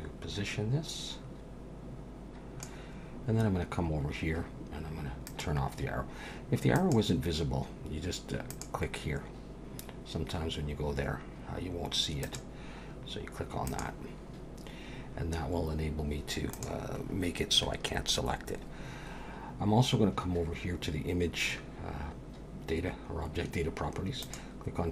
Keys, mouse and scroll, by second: 5.3 click, 12.2 click, 16.5 click, 17.0-18.0 scroll down 1, 18.0-19.6 scroll down 2, 24.2 click.